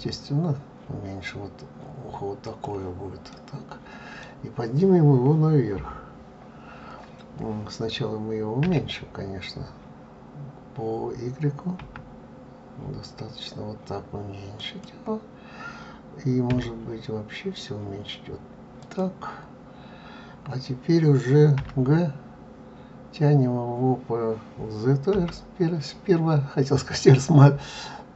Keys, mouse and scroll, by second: 3.4 middle click.